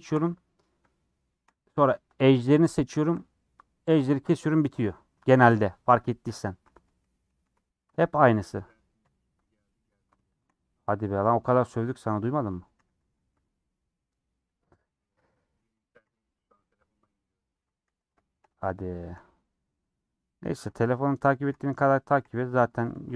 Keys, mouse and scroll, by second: 0.0 shift+click, 0.2-1.4 middle drag, 1.4 shift+click, 1.6-3.0 middle drag, 3.0 shift+click, 6.5 middle click, 7.2 scroll up 3, 7.6 middle click, 8.2 alt+click, 9.0 ;, 9.4 middle click, 10.4 alt+shift+click, 11.5-12.8 middle drag, 12.8 a, 13.0 u, 14.2 scroll up 2, 14.4 middle click, 14.9 typing, 15.2 scroll down 6, 16.0 /, 16.7 middle click, 17.5 Tab, 17.9 scroll down 3, 18.7 click, 20.0 shift+click, 20.5 shift+click, 21.4 ctrl+j, 22.2 /, 22.5 middle click, 22.9 Tab.